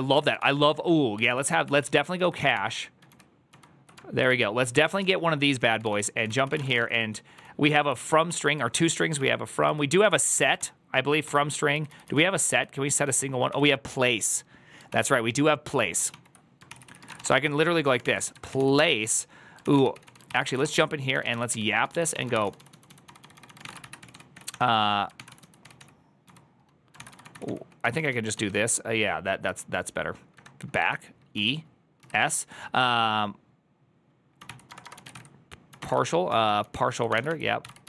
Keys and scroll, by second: 0.0 Tab, 0.1-2.9 typing, 2.9 ctrl+k, 3.9 ctrl+k, 4.8 ctrl+c, 4.8-6.6 typing, 6.3 ctrl+c, 6.7 ctrl+d, 6.8 ctrl+d, 7.2 ctrl+d, 8.2 k, 8.8 ctrl+d, 9.3 ctrl+d, 10.9 ctrl+d, 10.9 ctrl+u, 11.6 ctrl+u, 12.1 ctrl+u, 12.4 ctrl+u, 12.9 ctrl+u, 13.5 ctrl+d, 14.7 ctrl+o, 14.9 ctrl+o, 16.3 ctrl+o, 16.5 ctrl+c, 16.9 ctrl+c, 16.9 ctrl+:, 17.0-31.8 typing, 17.1 Return, 34.0-37.8 typing.